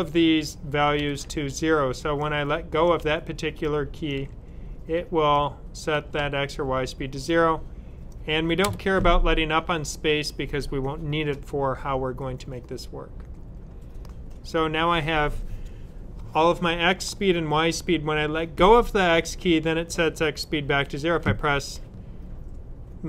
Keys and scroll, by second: 0.9 typing, 2.9 typing, 4.1 typing, 7.3 typing.